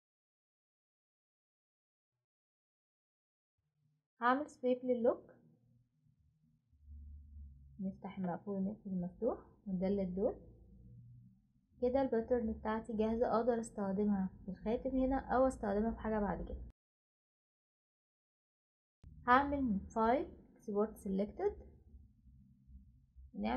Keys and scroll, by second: 4.9 typing, 9.2 Delete.